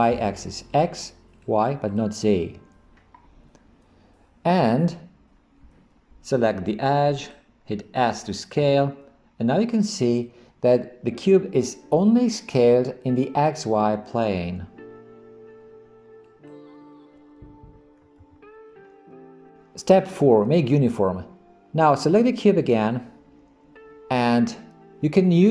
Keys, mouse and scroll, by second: 0.7 click, 1.4 click, 1.9 click, 7.2 click, 8.6 s, 18.2 ctrl+z, 22.6 click.